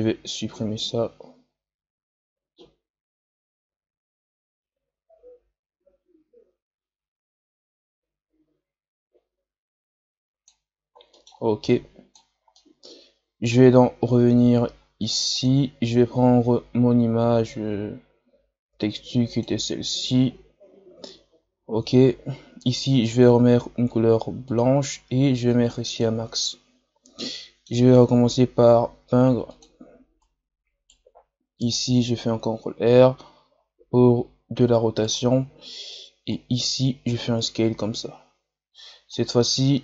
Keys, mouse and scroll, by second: 10.6-11.1 scroll down 2, 11.1 middle click, 11.6 click, 12.3 scroll down 1, 12.5-17.4 middle drag, 17.4-19.4 drag, 24.4-27.2 drag, 27.2-28.7 middle drag, 28.7 f, 30.1-34.6 right drag, 36.2-39.3 shift+right drag, 39.3-39.8 middle drag.